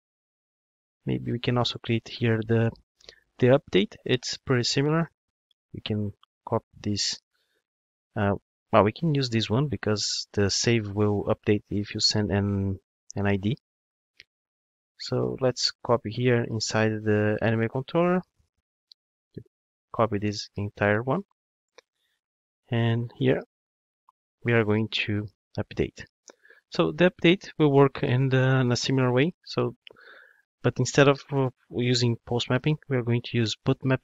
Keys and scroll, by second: 19.5 super+c, 23.7 super+v, 33.6 Return.